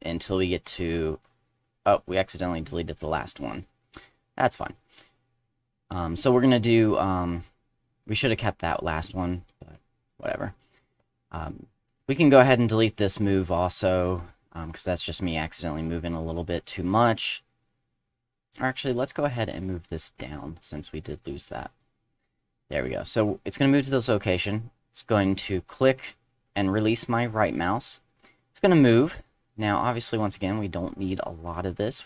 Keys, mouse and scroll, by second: 10.0 ctrl+z, 11.9 click, 18.8 click, 21.7 click, 23.1 click, 29.1 click, 31.3 middle click.